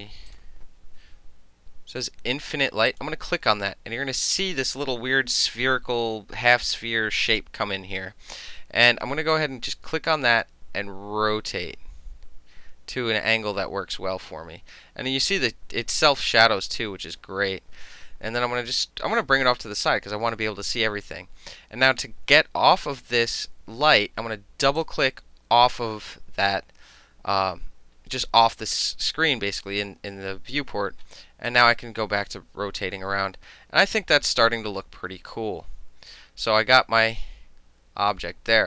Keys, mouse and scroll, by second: 0.3 click, 2.9 click, 3.0-9.4 middle drag, 9.4-20.4 drag, 24.7 click, 24.8 click, 26.3-31.5 middle drag, 31.5-34.4 drag.